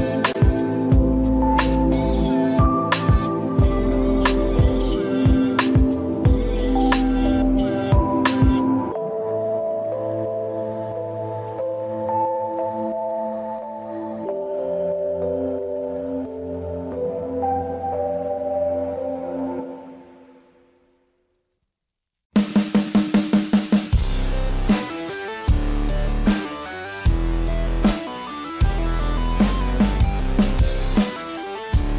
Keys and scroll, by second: 8.9 ], 10.8 space, 13.8 space, 20.3 space, 22.2 ctrl+=, 22.7 space.